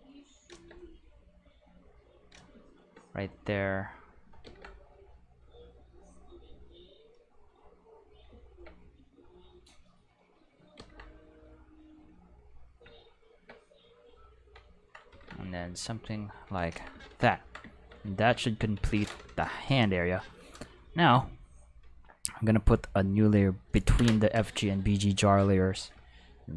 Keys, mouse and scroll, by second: 1.6 click, 3.6 click, 4.4 ctrl+z, 5.1-7.1 drag, 9.4 click, 10.8 ctrl+z, 11.6 click, 14.1 click, 15.1 ctrl+z, 16.0 click, 18.9 ctrl+s, 21.1 click, 22.3 click, 23.0 click, 23.1 click.